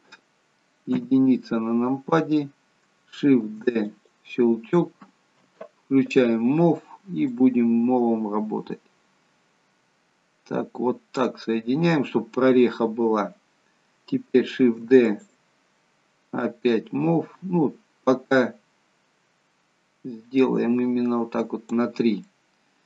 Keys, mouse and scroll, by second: 1.1 KP_1, 3.8 shift+d, 6.2 click, 14.8 shift+d, 16.5 click, 22.4 middle click.